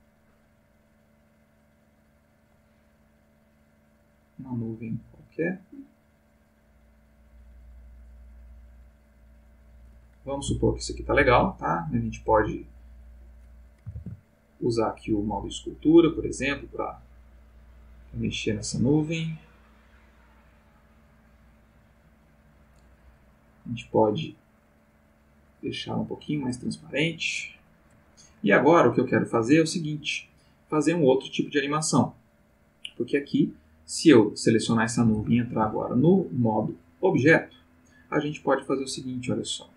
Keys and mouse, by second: 10.8 ctrl+middle click, 13.9 ctrl+Tab, 14.9 click, 16.9 click, 18.0 click, 19.4-20.2 drag, 20.8 click, 21.5-22.5 drag, 24.2 click, 25.1-26.9 drag, 35.1 ctrl+Tab, 37.1 click.